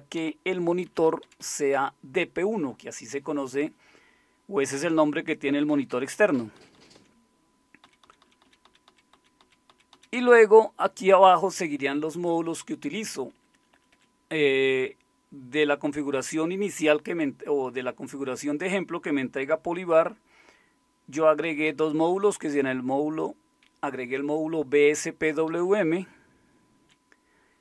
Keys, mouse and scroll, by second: 0.1 Down, 0.8 Left, 1.0 Left, 1.2 Left, 1.4 Left, 6.5 Down, 6.7 Down, 7.0 Down, 7.8 Down, 8.0 Down, 8.2 Down, 8.4 Down, 9.1 Down, 9.1 Down, 9.4 Down, 9.9 Down, 13.3 Up, 13.5 Up, 13.7 Up, 13.9 Up, 21.4 Down, 21.7 Down, 22.1 Up, 25.3 Down, 25.5 Down, 25.6 Down, 25.8 Down, 26.0-27.6 Down.